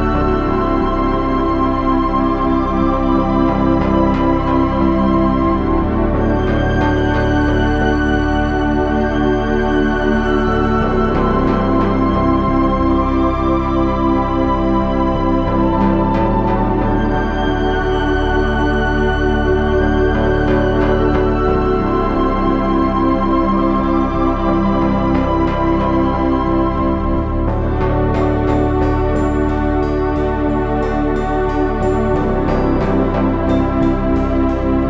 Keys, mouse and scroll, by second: 1.1 KP_7, 1.5 z, 1.8 c, 4.6 ctrl+z, 5.3 c, 7.8 g, 9.5 g, 10.2 c, 16.6 Tab, 17.1 z, 18.0 Tab, 18.3 z, 22.0 Tab, 23.5 Tab, 24.2 z, 25.3 g, 26.8 g, 28.9 Tab, 29.8 z.